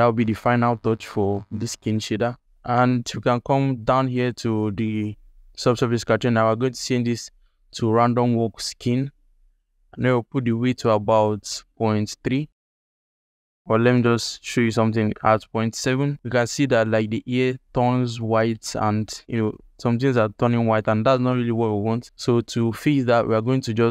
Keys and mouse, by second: 4.0 click, 5.9-8.7 drag, 9.8-12.6 drag, 13.5-15.5 drag, 23.3-23.9 drag.